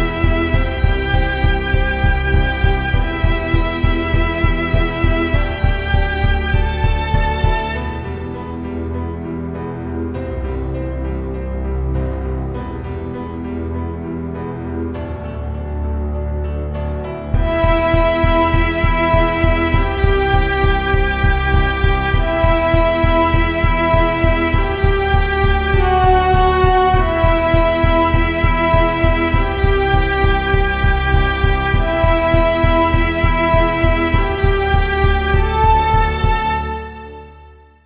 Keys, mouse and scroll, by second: 15.0-28.0 drag, 28.1 shift+z.